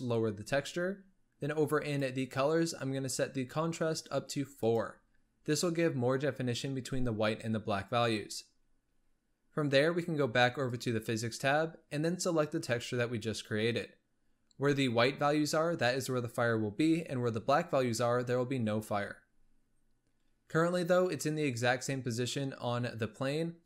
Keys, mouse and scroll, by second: 1.7-4.7 drag, 5.1-8.2 scroll down 1, 10.5 click, 12.5-15.7 drag.